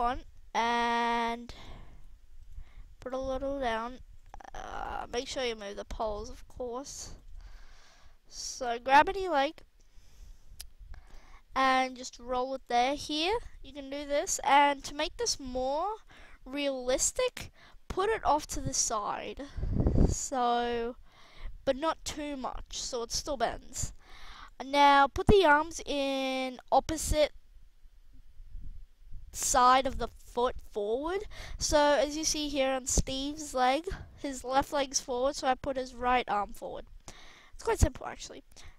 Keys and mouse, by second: 0.7-1.5 right drag, 1.9 g, 3.1 g, 5.4 g, 9.3 g, 11.4 r, 12.6 drag, 12.7 r, 13.3-14.0 drag, 13.3 g, 16.0 KP_1, 19.1-20.0 middle drag, 22.0-22.5 middle drag, 24.0-24.8 middle drag, 32.3-32.9 middle drag, 33.7-36.0 middle drag, 36.3 middle click, 36.5 middle click, 38.5 r.